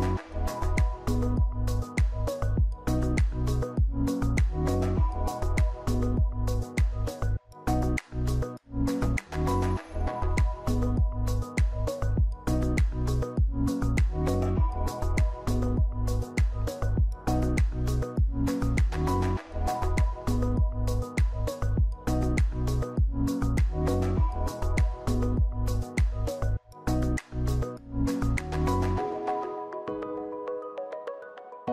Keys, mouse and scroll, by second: 15.5 alt+[, 20.1 ctrl+c, 20.1 ctrl+v.